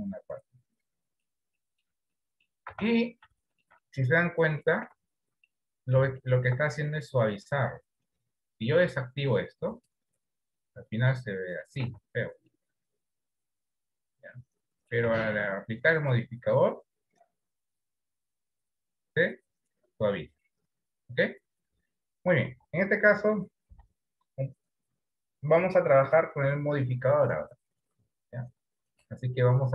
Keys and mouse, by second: 1.7 shift+middle click, 2.5 middle click, 2.9 Tab, 3.6 shift+middle click, 4.0 middle click, 5.2 Tab, 5.9 middle click, 6.6 shift+middle click, 10.7-11.9 middle drag, 12.1 Tab, 12.9-15.3 middle drag, 15.3 Tab, 16.3-18.0 drag, 18.7 middle click, 22.7 Delete, 24.0 KP_1.